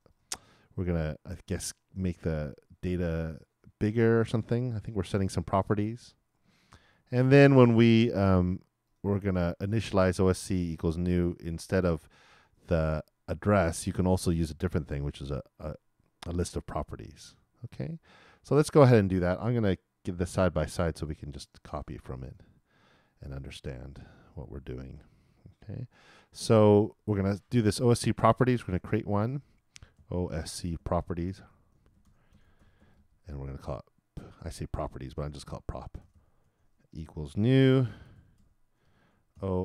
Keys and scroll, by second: 29.9-31.7 typing, 38.9-39.6 typing.